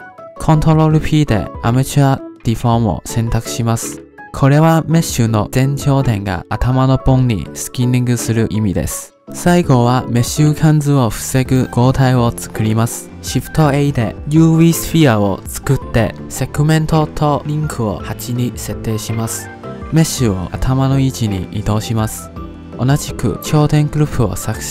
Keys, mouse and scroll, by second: 0.7 ctrl+p, 10.2 click, 11.2-12.0 scroll down 3, 12.0-13.4 middle drag, 13.4 shift+a, 17.0-19.8 drag, 19.8-20.7 middle drag, 20.7 g, 23.0-24.4 drag.